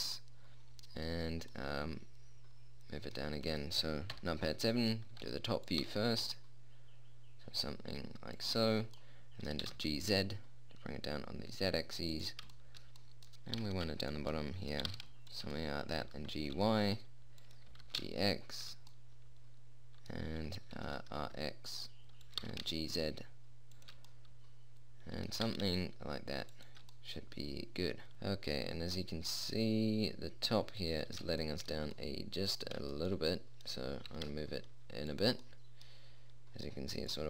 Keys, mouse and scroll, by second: 4.5 KP_7, 5.6 r, 6.2 g, 9.1 click, 10.0 g, 12.9 middle click, 13.9 g, 15.2 g, 16.5 g, 18.1 g, 19.3 middle click, 21.1 r, 22.8 g, 24.5 middle click, 25.8 r, 31.8 middle click, 32.5 middle click, 34.3 g.